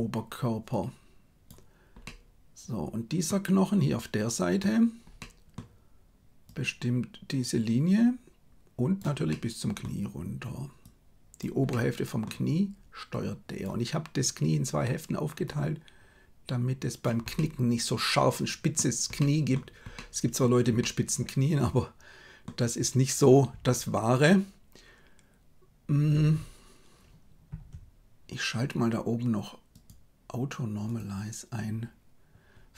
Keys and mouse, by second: 0.8 click, 2.0-3.2 middle drag, 4.4 right click, 5.1 middle click, 6.4-9.0 drag, 9.3 middle click, 10.7 click, 11.6 middle click, 13.0 click, 15.4-17.0 drag, 17.3-18.7 middle drag, 19.1 middle click, 19.9 middle click, 20.7-22.5 middle drag, 29.8-31.8 drag.